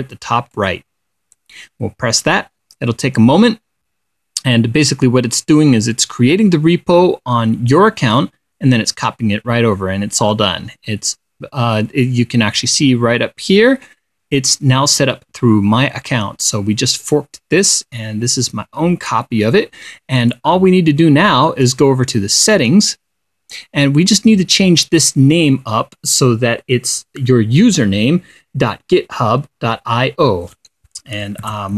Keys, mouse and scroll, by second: 1.0 click, 17.6-19.8 drag, 20.7 click, 22.9 click, 25.0 click.